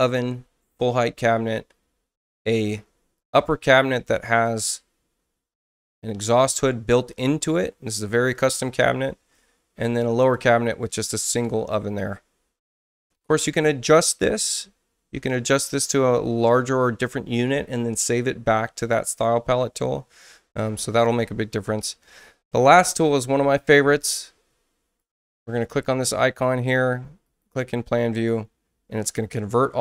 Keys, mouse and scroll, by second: 2.6 space, 3.2 click, 4.4 click, 8.4 click, 10.2 click, 25.0 click, 27.2 click.